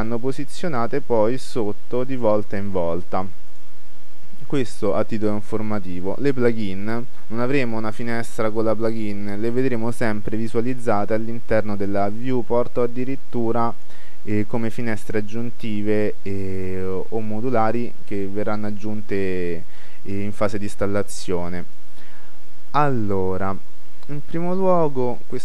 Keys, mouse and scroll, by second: 1.0-2.7 drag, 1.6-3.6 scroll down 1, 3.6-5.5 drag, 4.8-5.3 scroll up 1, 5.3-7.2 middle drag, 13.5-15.2 drag, 20.9-22.6 drag.